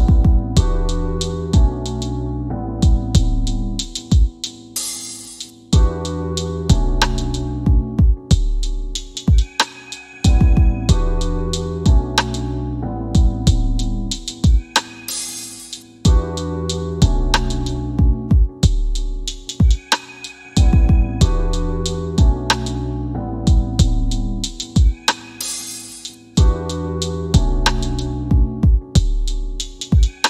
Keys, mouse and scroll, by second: 0.4 middle click, 1.8 click, 2.5 right click, 3.7 click, 4.4 scroll up 1, 5.0 alt+middle click, 6.7 middle click, 8.5 scroll down 1, 8.9 click, 9.0 w, 10.8 w, 11.6 scroll down 1, 12.7 click, 12.8 w, 13.2 click, 13.3 w, 14.0 scroll up 1, 17.6 click, 18.7 scroll up 1, 20.1 click, 22.0 w, 23.1 click, 27.9-30.2 typing, 29.3 Down, 29.8 KP_Enter.